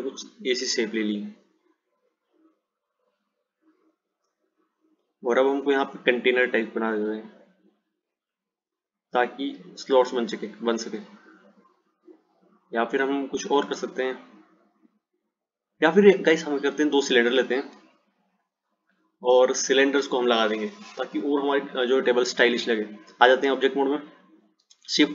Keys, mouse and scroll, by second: 12.2 click, 18.0 ctrl+z, 18.4 ctrl+z, 19.7 click, 21.6 click, 23.7 Tab, 24.8 shift+a.